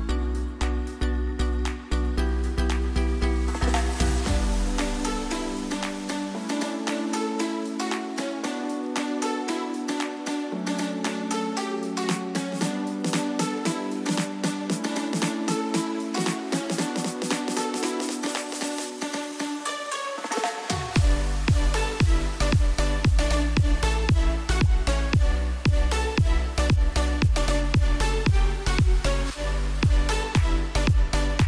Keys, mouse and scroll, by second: 0.2 alt+scroll down 1, 0.8 scroll up 1, 1.5 alt+scroll down 1, 1.7-2.7 scroll up 1, 5.4-7.6 drag, 8.7-9.2 alt+scroll up 1, 10.6-16.3 drag, 23.4 ctrl+t, 25.0 Left.